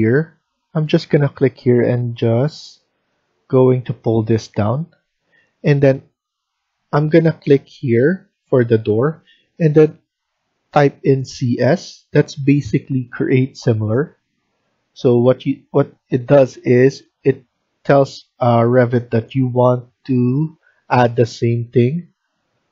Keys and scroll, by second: 11.2 typing.